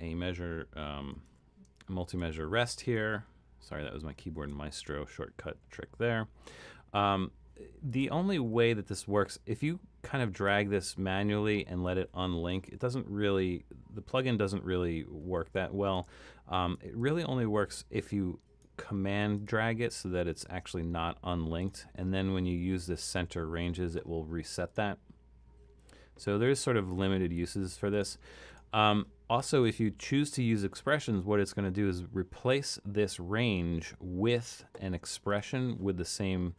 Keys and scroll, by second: 3.2 super+=, 4.3 super+=, 12.7 super+-, 15.4 super+z.